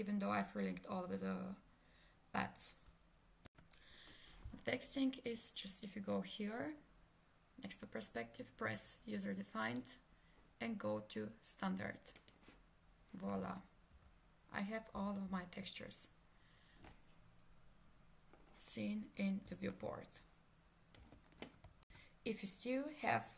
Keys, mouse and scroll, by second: 3.5 ctrl+space, 12.3 click, 13.9 F4, 19.5 s, 19.7 click, 21.0 w.